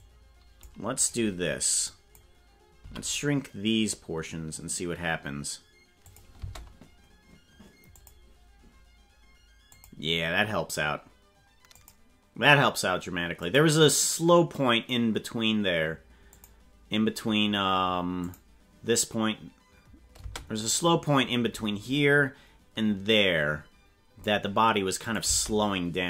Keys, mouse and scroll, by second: 1.9 click, 2.8 s, 6.4 space, 8.0 click, 9.7 click, 11.8 click, 13.4 click, 16.3 click, 18.4 click, 20.2 space, 20.7 click, 23.7 click, 25.0 click, 25.2 space.